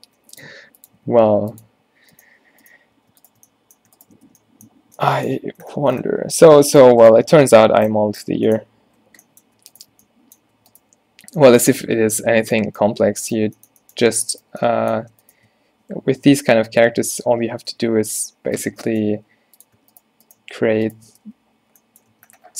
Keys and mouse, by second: 0.0-1.0 typing, 2.2 click, 2.3 right click, 4.4 f, 4.9 Tab, 5.7 Tab, 6.8 click, 7.4 z, 9.8-12.3 middle drag, 12.3 ctrl+z, 15.5 click, 16.5 ctrl+z, 16.9 ctrl+z, 17.8 f, 18.6-19.7 drag, 19.2 e, 21.3 right click, 21.3 f, 21.6 z, 22.2 Tab.